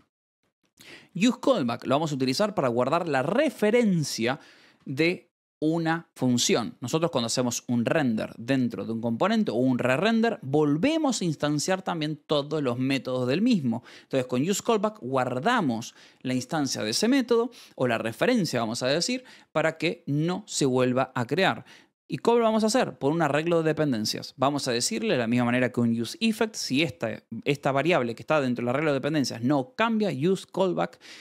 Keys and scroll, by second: 0.3 e, 1.5 Escape, 4.4-5.2 typing.